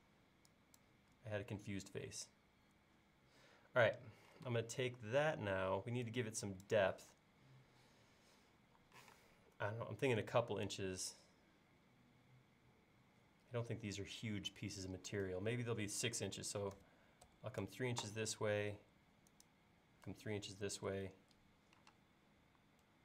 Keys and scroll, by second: 9.1 p, 16.8 3, 17.3 Return, 20.7 3, 20.8 Return, 22.0 space.